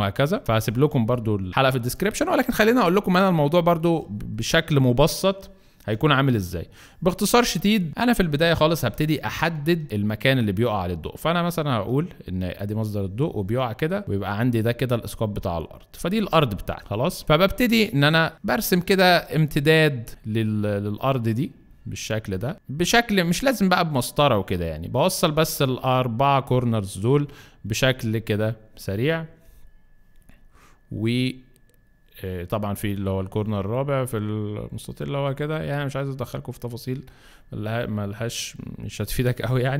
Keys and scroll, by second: 1.5 Left, 5.8 b.